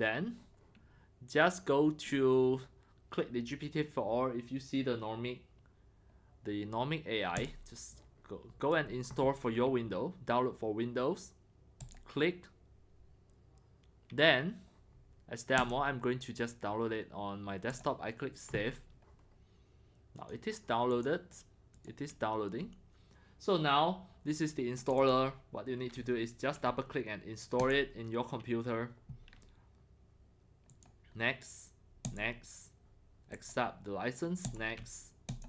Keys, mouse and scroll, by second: 7.3 click, 7.5 click, 8.0 click, 8.1 click, 8.3 drag, 11.8 click, 15.6 click, 17.7 click, 20.1 click, 20.9 click, 21.7 click, 23.4 scroll, 24.8 click, 25.0 click, 26.6 click, 27.6 click, 28.7-30.1 drag, 30.7 click, 32.0 click, 33.3 click, 34.4 click, 35.3 click.